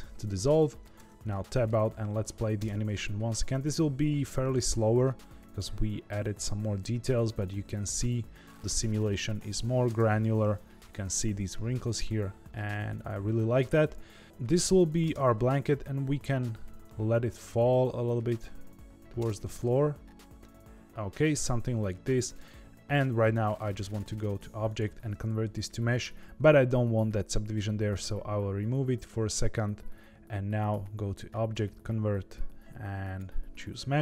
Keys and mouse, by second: 0.1 middle click, 1.0 Tab, 1.4 middle click, 2.1 middle click, 2.7 space, 10.1 space, 11.9-14.4 middle drag, 15.0 space, 16.2 middle click, 19.3 space, 19.4-22.3 middle drag, 23.8 click, 25.9 click, 27.9 click, 30.5-33.2 drag.